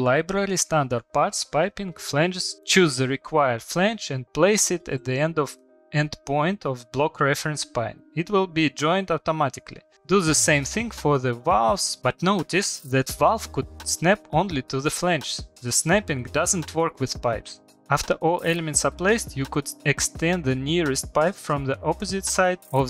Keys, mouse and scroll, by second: 0.8 Escape, 1.3 click, 1.7 Delete, 2.4 click, 3.9 click, 5.3 click, 8.9 middle click, 8.9 middle click, 9.3 middle click, 10.2 shift+middle click, 11.1 click, 11.9 click, 12.0 Escape, 12.3 click, 14.4 click, 15.3 click, 16.7 click, 19.3 Escape, 19.4 click, 19.8 scroll, 21.1 click, 22.1 click, 22.5 middle click, 22.5 middle click, 22.7 Escape, 22.7 middle click.